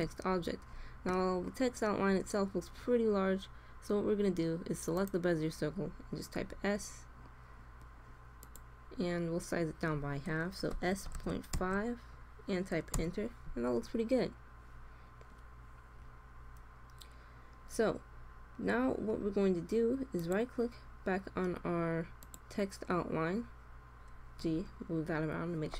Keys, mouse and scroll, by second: 0.2-4.0 middle drag, 0.2-0.6 scroll down 1, 4.8 right click, 6.3 s, 6.4 click, 10.6 s, 14.3-20.9 middle drag, 24.3 g.